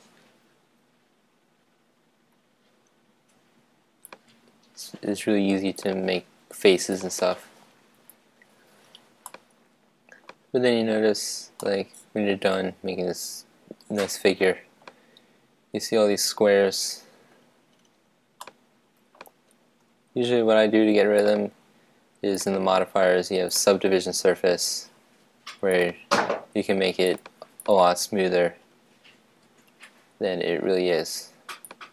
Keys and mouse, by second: 5.7-8.8 drag, 9.2-11.2 middle drag, 11.6-13.4 middle drag, 18.4-20.2 middle drag, 21.2-24.2 drag, 25.7-29.4 drag, 31.8-31.9 drag.